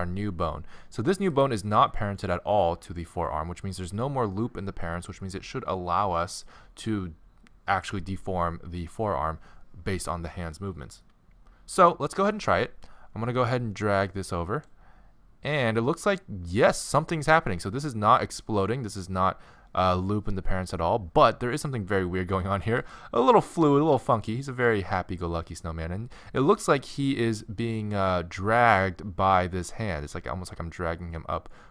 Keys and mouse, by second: 1.3-6.4 drag, 14.5 g, 23.1-26.4 middle drag, 23.5 g.